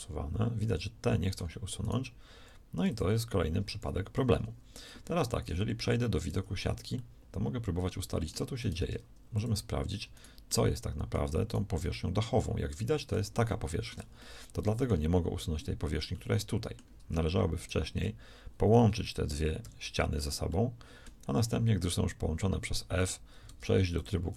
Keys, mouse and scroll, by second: 2.3 x, 5.1 ctrl+z, 6.2 z, 8.7 ctrl+Tab, 19.6 f, 23.4 ctrl+Tab.